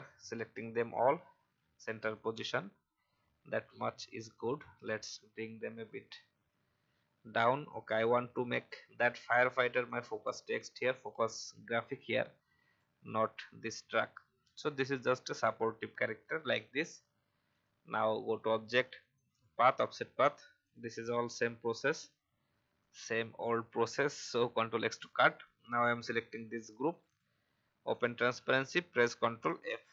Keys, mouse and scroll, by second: 7.7-10.0 alt+shift+drag, 12.0-13.0 shift+drag, 14.2 Up, 14.5 Up, 17.5 click, 25.3 click.